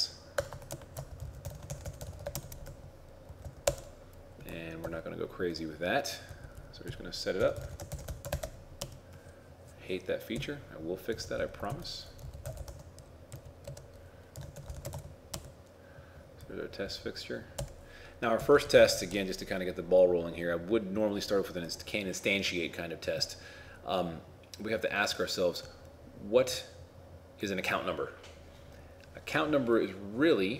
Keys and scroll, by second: 0.8 shift+a, 1.8 shift+n, 2.5 shift+t, 4.9 ctrl+4, 8.0 shift+n, 11.7 ctrl+Right, 14.6 shift+t, 15.0 shift+f, 18.7 shift+t.